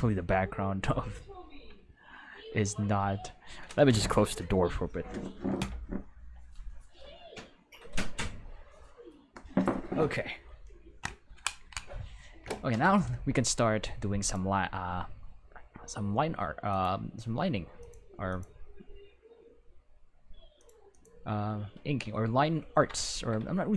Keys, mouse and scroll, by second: 14.2 click, 16.6 click, 17.7 click, 18.2 click, 19.0 middle click, 19.7 middle click, 20.5 click, 20.9 click, 21.6 middle click, 22.1-22.9 ctrl+middle drag.